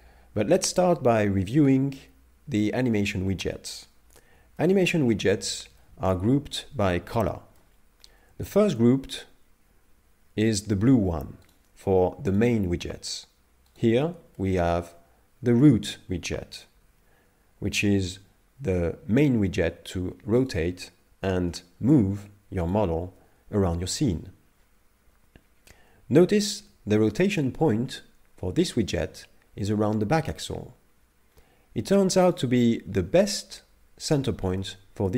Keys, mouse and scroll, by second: 4.6 shift+middle click, 5.1 middle click, 5.8 shift+middle click, 7.1 middle click, 8.4 shift+middle click, 11.5 right click, 12.4 right click, 13.8 right click, 14.4 shift+middle click, 14.9 middle click, 16.8 r, 20.5 right click, 21.2 g, 26.4 r, 34.6 middle click.